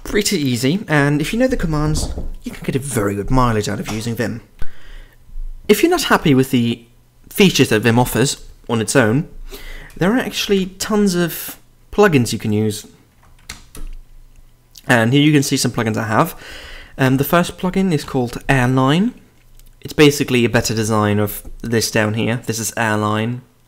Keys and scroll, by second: 4.6 ctrl+r, 10.4-11.1 typing, 12.9-14.0 typing, 18.0 typing.